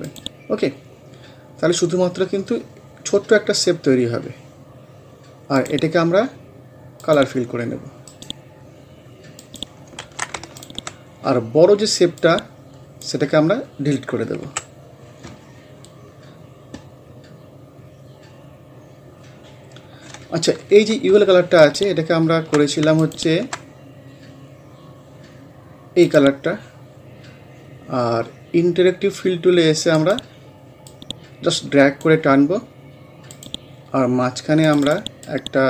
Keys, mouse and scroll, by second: 5.6 click, 8.1 right click, 8.8 scroll down 1, 9.4 click, 10.1 ctrl+z, 10.6-14.5 alt+drag, 14.5 Delete, 16.3 scroll down 1, 17.2 scroll up 1, 18.8 scroll down 1, 19.8 scroll up 1, 21.6 alt+click, 27.4-27.7 scroll up 1, 30.0 click, 30.0-35.6 drag.